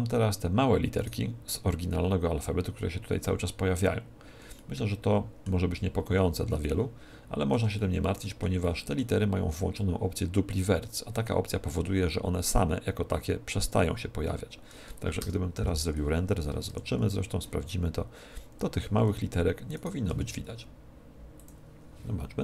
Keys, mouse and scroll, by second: 0.9 right click, 4.5-7.0 middle drag, 5.6 z, 10.4-13.5 middle drag, 15.9 middle click, 16.6 shift+2, 19.7 right click, 20.0 g, 21.5-22.4 drag.